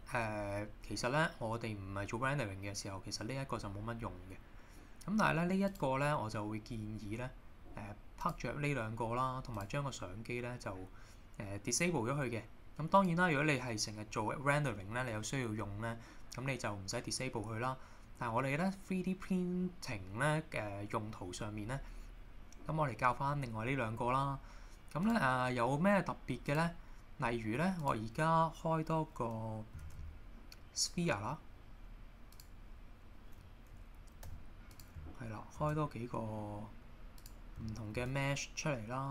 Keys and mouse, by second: 26.5 click, 27.8 click, 29.8 shift+a, 33.4 middle click, 34.3 g, 34.7 click, 35.6 shift+d, 37.2 click, 37.9 shift+a.